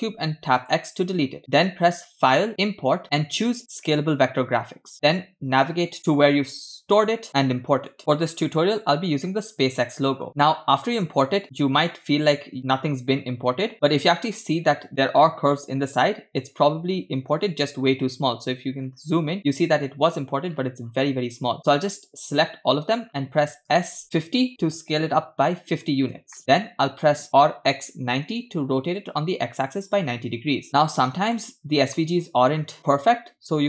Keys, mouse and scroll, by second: 0.1 x, 2.0 shift+a, 2.3-8.0 drag, 10.2 scroll up 1, 10.3 scroll down 2, 16.5-17.4 scroll up 4, 17.4-17.9 scroll up 7, 17.9-18.9 scroll up 5, 19.5-20.0 scroll up 5, 20.9-21.6 scroll down 6, 21.6-22.3 drag, 23.0-23.7 scroll down 2, 23.9 s, 25.7-26.4 scroll up 3, 26.4 shift+middle click, 27.8 r, 29.9-30.7 scroll up 6, 31.3-32.0 shift+middle drag, 33.5-33.6 scroll up 3.